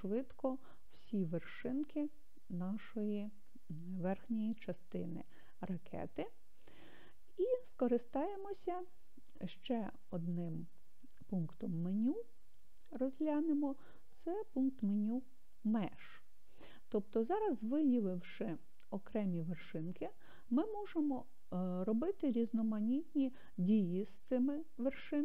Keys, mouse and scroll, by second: 15.4-25.2 drag.